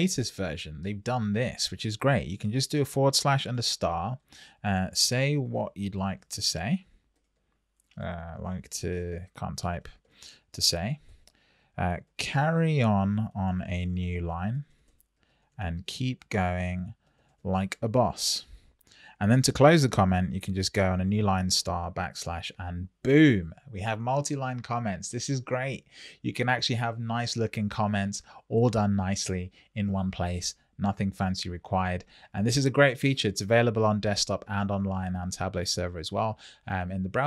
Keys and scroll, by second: 3.4 shift+8, 4.7 shift+s, 11.0 Return, 14.8 Return, 20.0 Return, 20.9 shift+8.